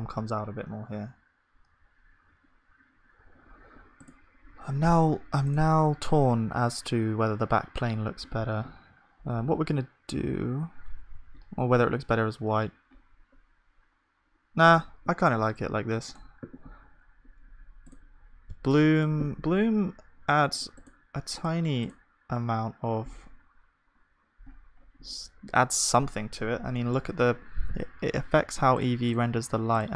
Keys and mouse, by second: 19.3-24.9 drag, 24.9-29.7 middle drag, 29.7-29.9 drag.